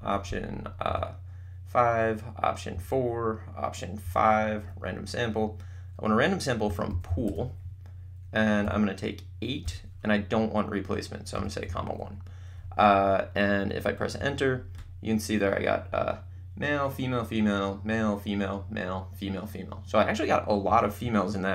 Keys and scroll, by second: 1.1 5, 3.0 4, 4.9 5, 6.5-9.6 typing, 11.3 ,, 11.7 1, 14.2 Return.